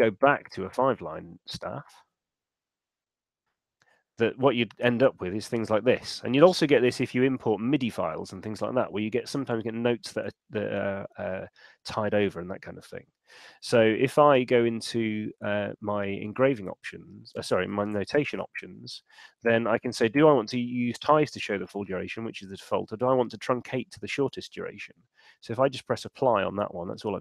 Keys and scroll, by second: 14.1 shift+super+e, 17.8 Escape, 18.2 shift+super+n.